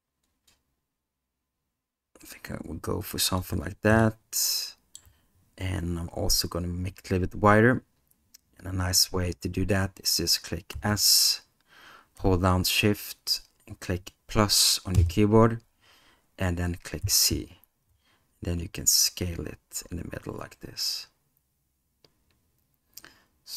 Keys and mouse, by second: 4.0-5.0 middle drag, 10.7 s.